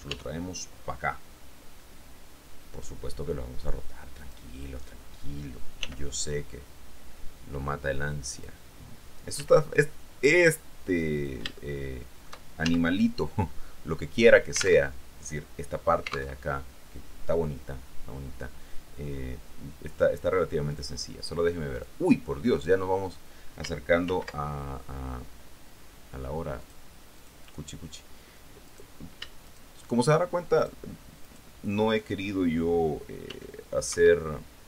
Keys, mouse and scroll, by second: 0.3 g, 4.4 click, 6.0 r, 8.5 click, 9.5 g, 11.3 click, 11.7 shift+middle click, 12.8 shift+z, 13.7-14.3 scroll up 2, 15.1 alt+Tab, 16.6 alt+Tab, 20.9 click, 21.9 click, 24.3 ctrl+r, 26.8 click, 27.3 click, 28.9 right click, 29.7 shift+right click, 30.7 shift+right click, 33.5 s, 34.2 Escape.